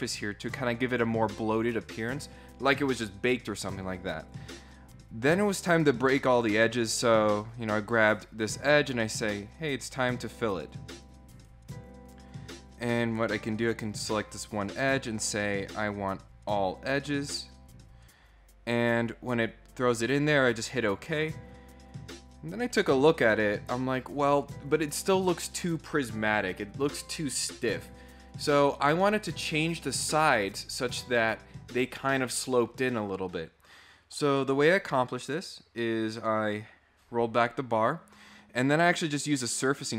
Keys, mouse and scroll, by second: 4.2 click, 5.5 click, 7.3 click, 8.8 click, 11.3 right click, 12.1 click, 13.4 click, 15.7 click, 20.4 right click, 22.6 click, 36.0 click.